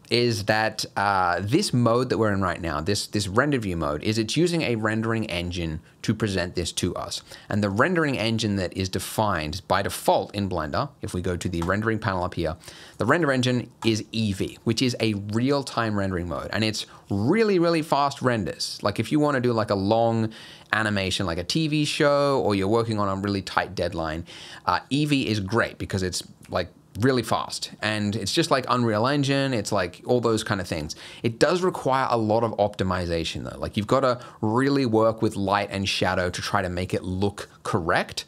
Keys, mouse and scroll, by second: 11.6 click, 12.9 click, 13.1 click, 13.8 click, 32.3-34.2 scroll down 2, 34.2 scroll up 2, 34.8-36.2 scroll down 1, 36.2-36.9 scroll down 1.